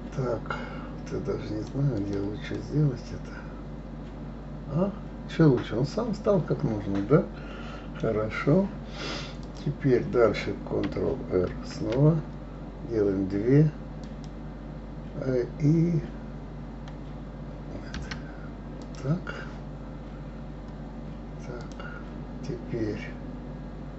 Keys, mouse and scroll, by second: 2.6-5.6 middle drag, 9.4 click, 11.5 ctrl+r, 18.8 click, 21.6 click.